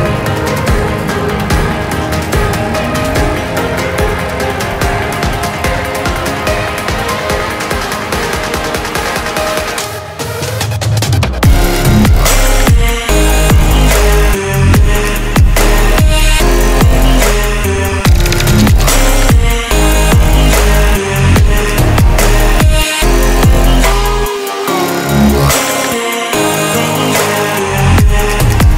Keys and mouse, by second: 17.9 click, 18.0 click, 18.0 typing, 24.7-28.7 typing.